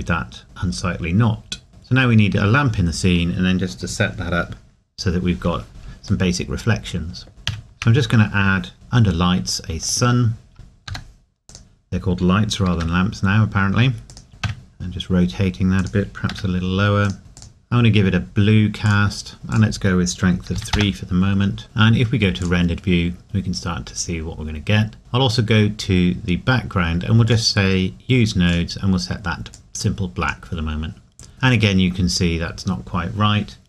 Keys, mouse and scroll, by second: 1.7 middle click, 1.8 scroll down 1, 6.3 middle click, 7.3 scroll up 1, 9.8 click, 10.9 g, 11.5 click, 12.7 r, 14.1 click, 14.3 r, 15.8 click, 16.3 r, 17.0 click, 20.5 KP_3, 21.6 ctrl+s, 22.4 click, 25.3 click, 31.3 scroll up 1.